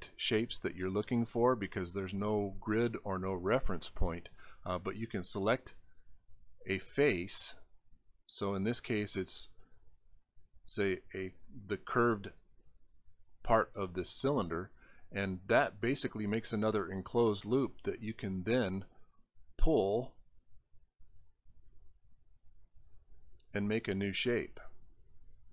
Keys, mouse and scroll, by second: 0.8 scroll down 3, 4.4 click, 6.6 click, 7.2 click, 7.9 click, 8.5 click, 9.0 click, 9.6 click, 10.2 click, 11.6 click, 18.5 click, 20.6-22.8 drag.